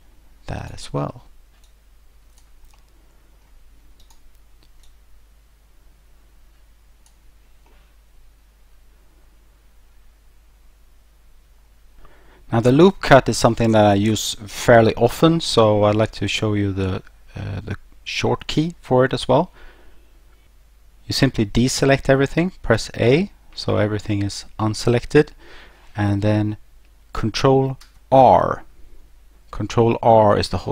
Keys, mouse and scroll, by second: 0.6 right click, 1.7 click, 2.8 middle click, 4.0 right click, 4.9 click, 7.7 middle click, 22.8 a, 27.8 ctrl+r.